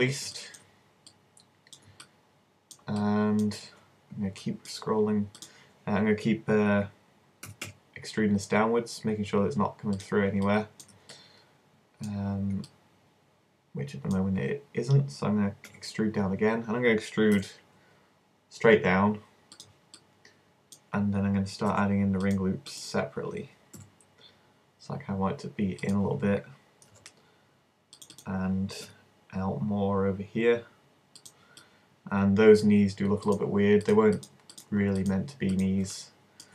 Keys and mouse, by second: 1.1-3.4 middle drag, 7.5 g, 10.0-11.2 drag, 11.2-12.4 middle drag, 15.7 e, 17.8-18.8 drag, 19.6 click, 20.2-21.6 middle drag, 21.7 ctrl+r, 22.9-24.6 drag, 23.8 s, 26.0 click, 26.9 ctrl+r, 27.2 click, 28.2 click, 28.9 s, 31.3 click, 31.8 middle click, 32.4 click, 33.2 middle click.